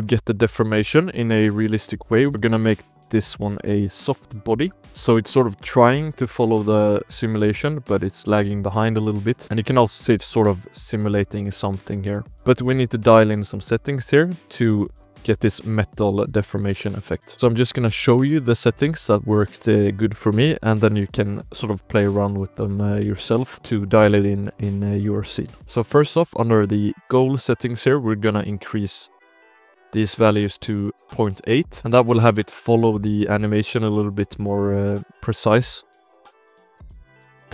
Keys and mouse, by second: 2.8 shift+drag, 4.2 click, 4.9 space, 5.6 space, 6.3 shift+click, 6.6 space, 7.8 space, 8.7 click, 8.9 space, 9.4 space, 9.6 click, 10.2 shift+drag, 10.5 space, 10.8-11.4 shift+middle drag, 11.7 space, 12.0 shift+click, 12.2 ctrl+s, 12.2 KP_Decimal, 12.5 click, 13.2 ctrl+s, 13.4 drag, 13.8 shift+middle click, 14.0-14.4 middle drag, 17.3 shift+drag, 17.9-18.8 shift+drag, 19.0 shift+click, 22.7-23.3 shift+drag, 23.6 click, 24.1 shift+drag, 25.4 shift+click, 25.8 click, 26.2 click, 26.6 shift+click, 27.4 click, 28.0-30.7 drag, 31.7 ctrl+s, 31.7 space, 34.1 shift+drag, 34.4 space, 35.0 shift+click, 36.1 space, 36.4 shift+drag, 36.7 space, 37.1 space.